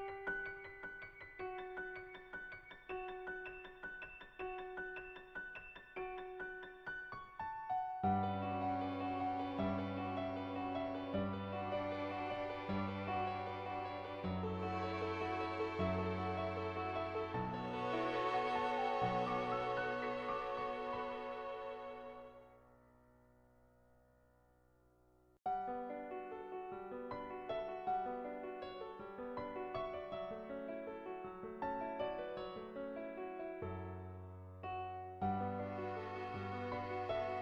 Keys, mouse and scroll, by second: 1.6-2.9 drag, 2.9 [, 3.7 click, 4.1 ], 4.2 ], 4.3 click, 9.8 ], 10.0 click, 10.3 [, 10.4 [, 10.6 click, 11.3 ctrl+z, 11.5 [, 11.6 click, 11.9 click, 12.9 ctrl+z, 13.6 ], 13.8 ], 14.0 ], 14.1 click, 14.7 ctrl+z, 15.0 ], 15.4 click, 15.8-16.8 drag, 20.1 click, 20.5 click, 20.9 click, 21.1 click, 22.1 ], 22.4 ], 22.5 click, 23.0 click, 23.6 click, 24.0 [, 24.4 click, 24.9 [, 25.1 click, 25.5 click, 26.6 [, 26.9 click, 27.4 ], 27.5 click, 28.0 click, 28.4 ctrl+z, 28.5 ctrl+z, 28.6 ], 28.8 click, 29.7 [, 29.8 [, 29.8 click, 31.0-33.4 drag, 33.7-34.9 drag, 35.5 click.